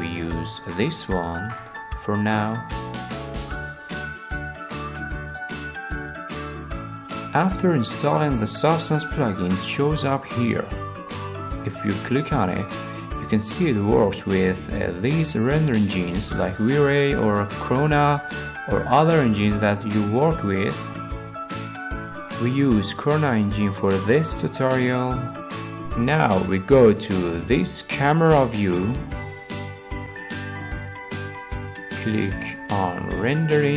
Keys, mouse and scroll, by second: 0.4-0.7 scroll, 1.2 click, 1.6-2.0 scroll, 2.7 alt+middle click, 2.9 middle click, 3.0 middle click, 4.3 alt+middle click, 4.6 scroll, 5.1-5.5 scroll, 5.9 scroll, 7.5 alt+middle click, 8.6 scroll, 9.6 middle click, 10.6-11.8 drag, 23.0 click, 23.9 middle click, 24.1-24.7 scroll, 24.7 middle click, 25.0 alt+w, 26.4-27.5 middle drag, 32.4-33.5 drag.